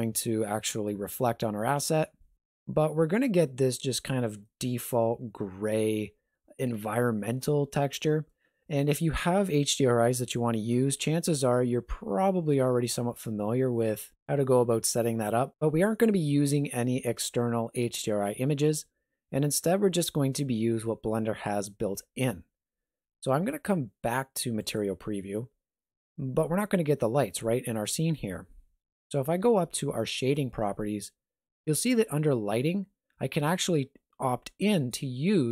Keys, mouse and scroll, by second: 4.5 middle click, 24.7 click, 30.2 click.